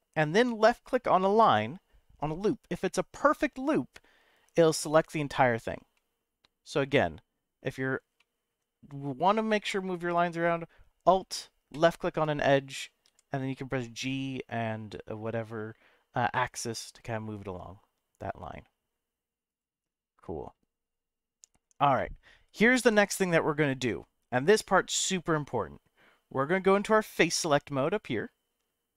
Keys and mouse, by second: 1.5 alt+click, 2.8-4.4 middle drag, 5.9 middle click, 8.2 middle click, 13.0 g, 14.0 x, 14.8 y, 19.5 right click, 21.9-24.0 middle drag, 24.9 middle click.